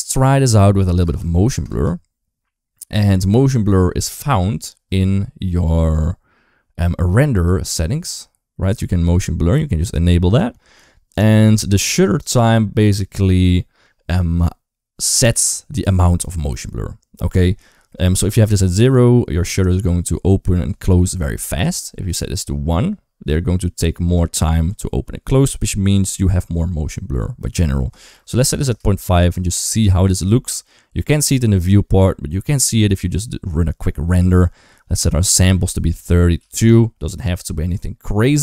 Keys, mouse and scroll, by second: 0.0-1.5 typing, 0.8 ctrl+s, 5.7 click, 7.1 click, 9.6 click, 10.1 click, 18.3 click, 23.2 click, 27.2-28.5 drag, 29.2 right click, 29.6 ctrl+s, 31.0 click, 32.3 click, 35.3-36.3 drag, 37.1 ctrl+s.